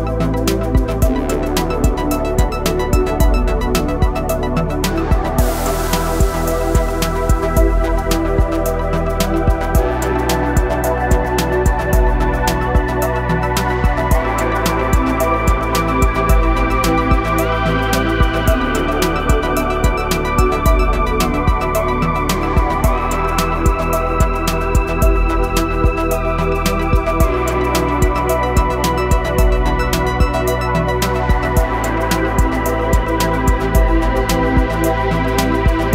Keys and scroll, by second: 3.9 e, 6.7 s, 9.6 z, 14.4 s, 17.9 e, 19.3 Escape, 20.5 s, 23.1 e, 29.0 i, 30.6 KP_1, 33.2 e.